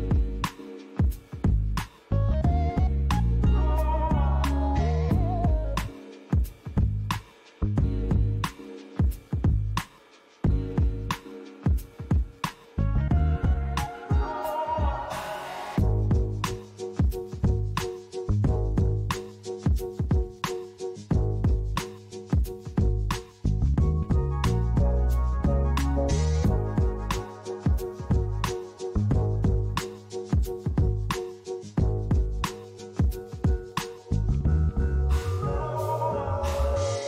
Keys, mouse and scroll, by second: 0.2 s, 2.7 click, 3.4 middle click, 4.1 s, 5.6 click, 6.1-6.6 scroll down 3, 6.6 middle click, 12.3 click, 13.7 click, 15.3 g, 19.3 click, 21.9 KP_0, 23.1-23.6 scroll down 3, 23.6 middle click, 24.4-25.2 scroll down 2, 25.2 click, 26.9 x, 28.4 shift+a, 33.1 g, 33.6 z, 34.8 click.